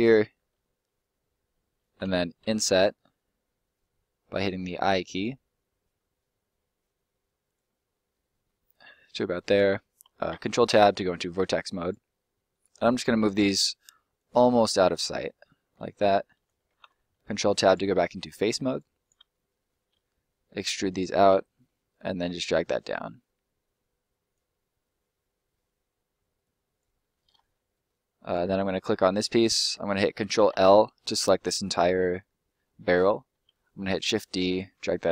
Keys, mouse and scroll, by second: 2.4 i, 7.4 click, 7.7 scroll up 1, 7.9 middle click, 9.6 scroll up 1, 10.3-10.7 ctrl+scroll up 1, 11.7 click, 12.5 right click, 12.7 shift+right click, 14.1 click, 17.6 click, 18.2 right click, 18.5 shift+right click, 19.2 middle click, 19.9 e, 20.8 click, 21.1 middle click, 22.2 click, 24.6 middle click, 26.4 click, 27.0 middle click, 27.3-27.7 scroll down 1, 27.7 middle click, 28.2 right click, 29.0 middle click, 29.9 ctrl+middle click, 30.3 ctrl+l, 31.0 scroll down 1, 31.3 middle click, 33.4 shift+d, 34.3 middle click.